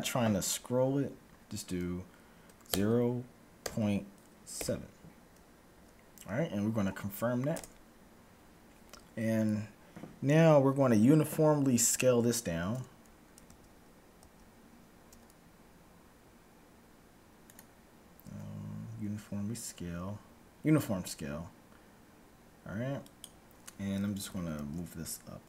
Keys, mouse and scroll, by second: 13.4 z, 14.2 z, 15.1 s, 18.2 s, 24.4 g.